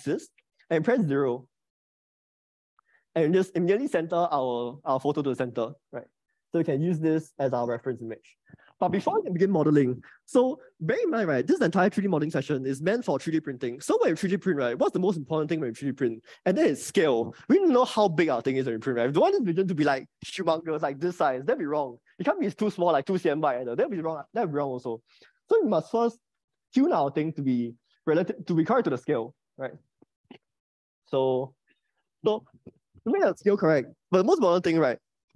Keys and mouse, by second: 0.4 click, 1.8-3.4 drag, 31.9 click.